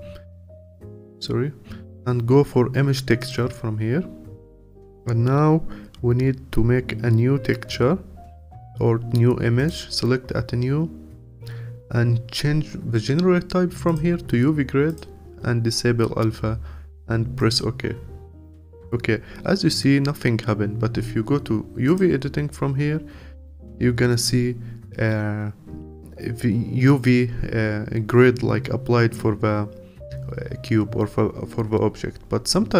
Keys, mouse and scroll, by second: 3.3-15.0 drag, 21.9 click, 23.2-24.0 scroll up 2, 24.0-28.4 scroll down 1.